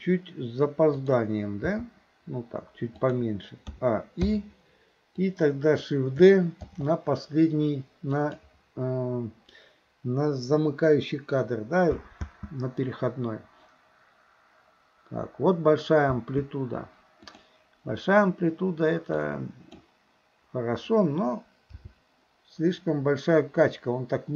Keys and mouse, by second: 1.0 click, 1.7 g, 3.8 a, 4.3 i, 5.2-5.9 drag, 6.7 shift+d, 12.3 space, 16.1 space, 17.3 click, 19.3-19.8 drag, 21.8 g.